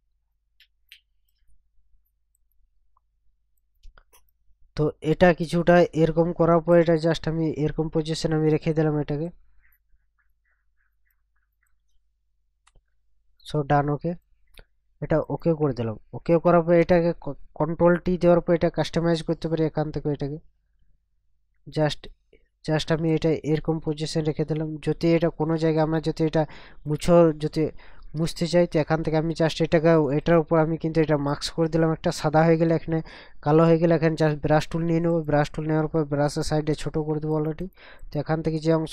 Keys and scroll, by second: 18.0 ctrl+t, 28.2 ctrl+KP_Add.